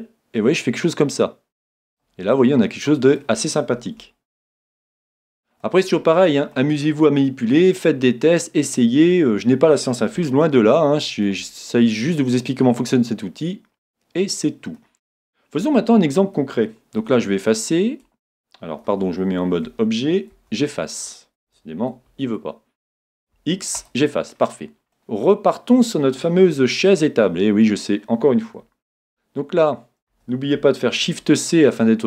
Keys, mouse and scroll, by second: 2.4-9.3 middle drag, 5.1 a, 10.3-12.2 middle drag, 12.4-14.3 middle drag, 15.6 a, 17.0 x, 19.7 a, 20.3 x, 22.2 Tab, 23.3 x, 24.5-29.0 middle drag, 29.0 shift+a, 31.0 shift+c, 31.9-32.0 middle drag.